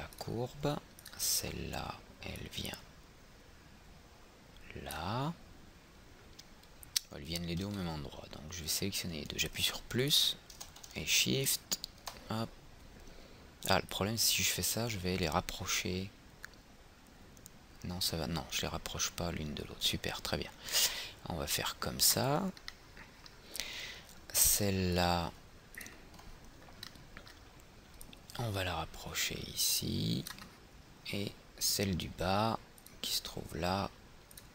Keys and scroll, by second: 7.9 ctrl+z, 8.5 ctrl+z.